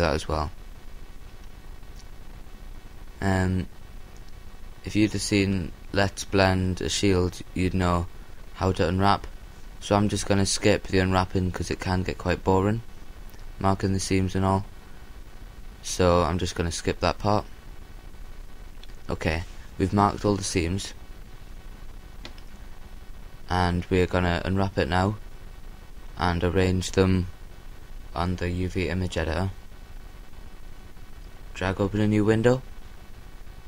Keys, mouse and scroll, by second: 0.4 g, 3.1-4.6 drag, 3.4-4.9 middle drag, 5.5 a, 7.3 l, 8.8 g, 10.0-11.5 drag, 10.3-12.1 middle drag, 13.9 Tab, 14.5-16.2 middle drag, 18.4 Tab, 18.7 middle click, 18.9-19.5 scroll up 1, 19.5 middle click, 19.9 a, 20.4 scroll up 1, 20.5 middle click, 21.0 middle click, 21.4-22.2 scroll down 1, 22.2-22.9 scroll down 1, 22.9-23.5 scroll down 1, 23.5-25.1 middle drag, 26.2 a, 28.3-29.5 drag, 31.3-33.4 drag.